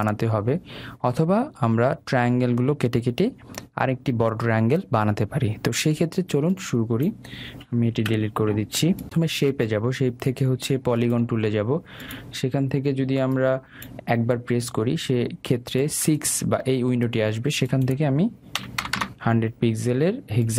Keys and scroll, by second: 8.1 Delete.